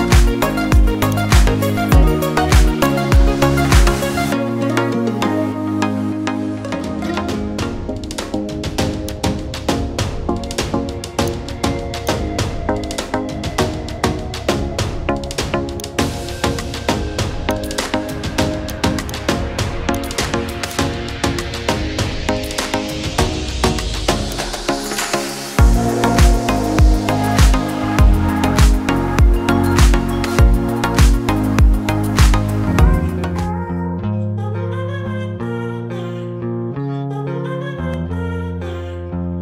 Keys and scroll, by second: 4.4 ctrl+g.